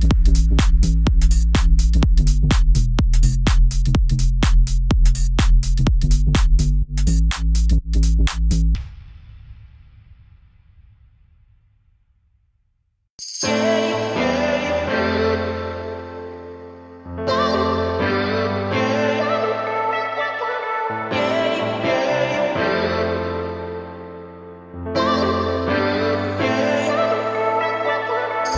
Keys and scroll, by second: 3.4 Escape, 5.5 Escape, 7.2 2, 7.5 Return, 11.5 Escape, 14.7 Escape, 16.6 Escape, 23.1 1.